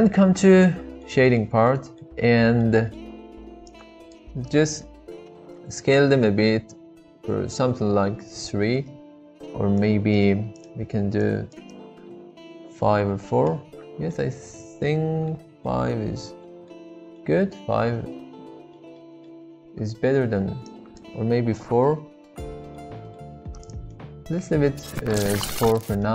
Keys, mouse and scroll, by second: 0.0 click, 1.0-1.4 middle drag, 1.7 middle click, 2.7 middle click, 3.8-8.8 drag, 9.8 click, 11.3-13.5 drag, 14.1-15.3 middle drag, 15.6-16.7 middle drag, 17.2-18.8 middle drag, 20.7-22.5 drag, 22.7-23.1 middle drag, 23.9-25.3 middle drag, 25.7 middle click.